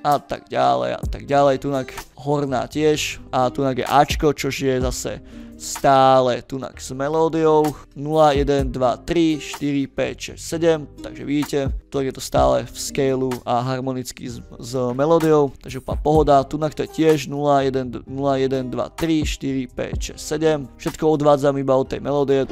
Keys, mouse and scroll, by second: 0.5 ctrl+middle click, 0.5 ctrl+scroll up 2, 2.6 scroll down 2, 4.6 click, 5.1 click, 5.8 click, 7.1 scroll down 2, 13.1 click, 14.7 click, 15.0 scroll down 2, 15.2 scroll up 2, 15.7 scroll down 2.